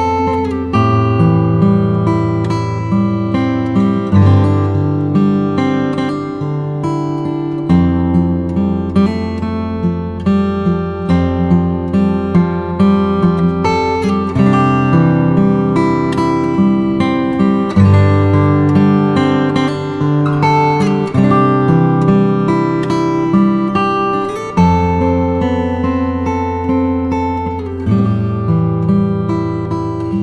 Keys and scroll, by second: 11.9 Return, 12.3 shift+Down, 13.3 shift+Left, 13.6 shift+Down, 22.5 shift+F6, 23.0 shift+Home, 23.9 alt+super+Delete.